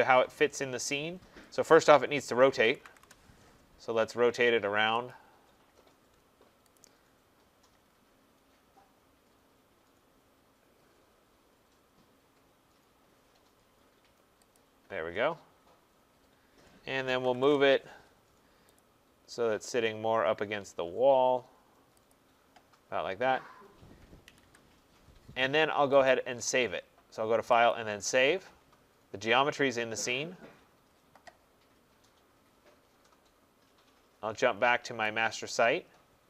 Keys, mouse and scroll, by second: 0.7 middle click, 0.8 middle click, 0.9 middle click, 2.2-3.4 typing, 5.1 click, 5.7 middle click, 5.8 middle click, 5.8 middle click, 6.8 shift+click, 7.8 shift+middle click, 7.9 shift+middle click, 7.9 shift+middle click, 9.9 shift+middle click, 14.6 shift+click, 15.5 middle click, 17.1 middle click, 17.1 typing, 17.4 shift+middle click, 18.8 click, 18.8 typing, 22.1 click, 24.3 Escape, 24.4 Escape, 26.1 click, 27.7 click, 35.2 click.